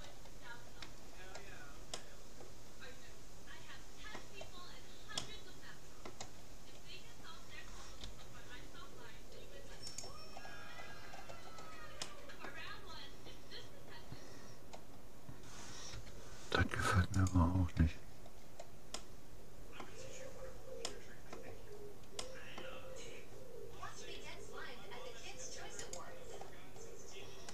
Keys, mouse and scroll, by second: 0.1-3.7 middle drag, 5.1-8.5 middle drag, 8.1 g, 10.5-13.7 middle drag, 15.9 u, 18.1-23.9 middle drag, 24.3 g, 26.3-27.5 middle drag.